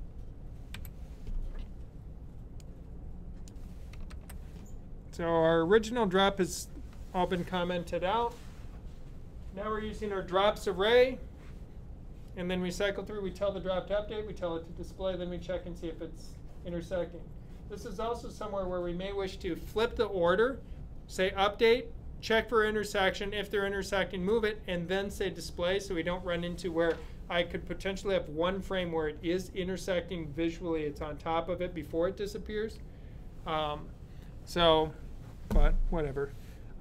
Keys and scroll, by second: 0.0-0.6 typing, 4.0 super+/.